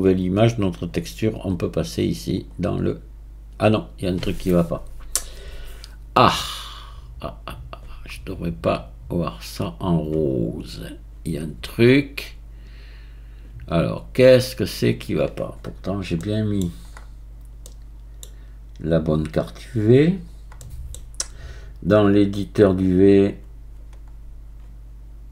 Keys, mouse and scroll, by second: 2.4 click, 14.5 click, 19.5-23.0 middle drag, 23.0-25.3 drag.